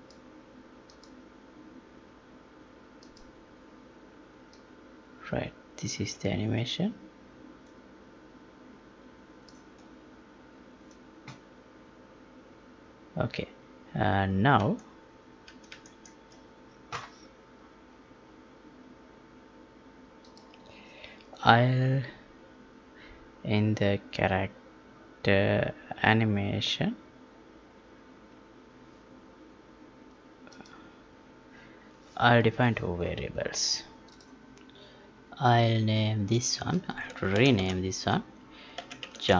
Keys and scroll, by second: 14.7 alt+Tab, 37.3 ctrl+r.